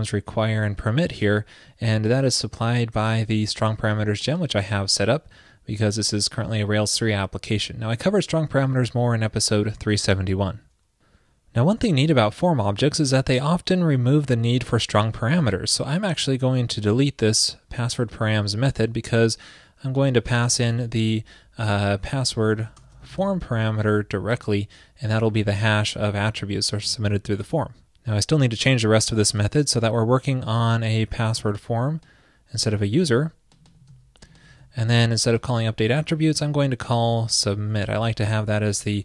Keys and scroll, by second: 20.9 ctrl+p, 31.4 super+c, 32.7 super+v, 33.9 super+c, 34.6 super+v, 38.8 alt+shift+Left.